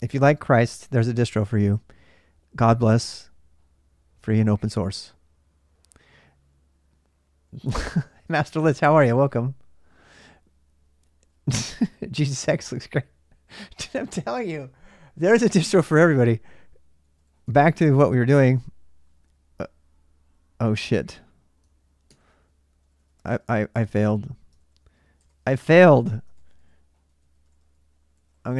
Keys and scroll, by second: 16.8-17.2 typing, 18.0 Return, 21.9 ctrl+c, 22.6-23.0 typing, 23.1 Return, 24.4 ctrl+c, 24.7-27.2 typing, 25.5 Return, 26.1 ctrl+a, 27.0 ctrl+a, 27.2 ctrl+l, 27.4 ctrl+l, 27.5 ctrl+l, 27.7 ctrl+l, 27.8 ctrl+l, 27.9 ctrl+a, 28.3 ctrl+l, 28.5 ctrl+l.